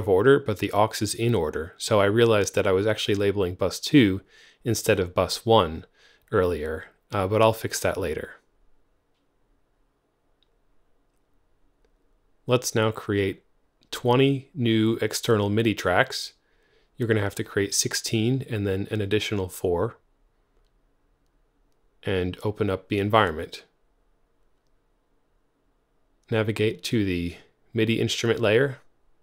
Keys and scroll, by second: 9.0 super+w, 10.2 alt+super+n, 14.0 typing, 15.0 typing, 15.2 Return, 16.6 x, 18.0 alt+super+n, 19.7 4, 20.0 Return, 22.0 super+o.